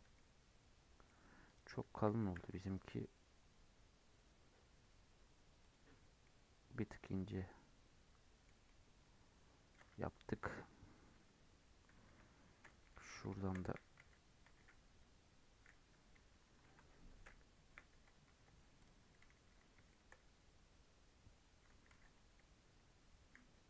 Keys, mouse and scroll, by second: 0.1-1.4 middle drag, 1.4 click, 2.0 s, 6.2-9.7 middle drag, 9.7 scroll up 1, 9.9 Tab, 11.1 KP_8, 11.9 KP_8, 12.1 KP_7, 12.9 alt+z, 13.4 shift+middle click, 13.7 1, 14.0 alt+z, 14.4 alt+z, 16.6 KP_7, 17.0-17.4 scroll up 1, 17.4 scroll down 2, 17.7 1, 18.8 click, 19.4-19.9 scroll up 1, 19.9 shift+middle click, 20.1-21.9 scroll up 1, 21.9 alt+z.